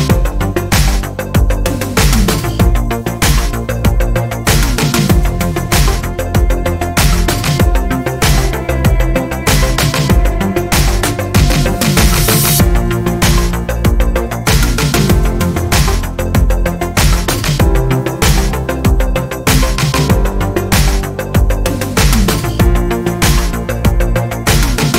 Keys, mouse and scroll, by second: 2.0 ctrl+shift+click, 3.4-6.1 ctrl+shift+drag, 7.5 ctrl+d, 8.0-11.5 ctrl+drag, 11.9-12.7 ctrl+scroll up 2, 12.8 ctrl+click, 17.2 click, 18.6-19.1 ctrl+scroll up 2, 20.2 ctrl+Down, 20.8 ctrl+Up, 21.8 ctrl+shift+Right, 22.9 ctrl+shift+Left, 23.3 ctrl+shift+Right, 23.7 ctrl+shift+Down, 24.3 ctrl+shift+Up, 24.7 ctrl+alt+shift+Down.